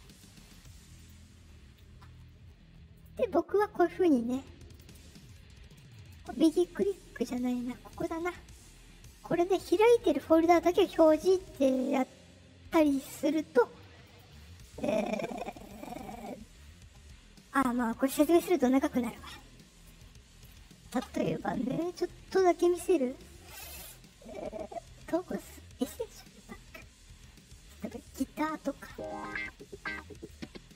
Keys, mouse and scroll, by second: 0.9 click, 2.9 click, 4.6 click, 5.8 right click, 7.8 click, 11.5 click, 13.1 click, 14.0 click, 15.2 right click, 17.5 click, 25.8 click, 27.6 click, 28.7 click, 30.1 click.